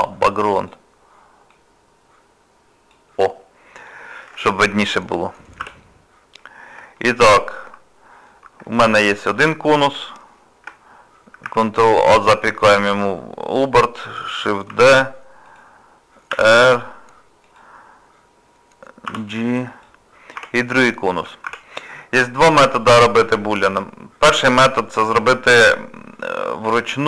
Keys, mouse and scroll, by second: 0.0 click, 0.6 click, 6.4 middle click, 7.0 shift+middle click, 7.4 middle click, 8.7 shift+middle click, 11.5 ctrl+a, 14.7 shift+d, 16.3 r, 20.7 middle click, 21.5 Tab, 22.4 shift+middle click, 22.9 scroll up 2, 23.4 middle click.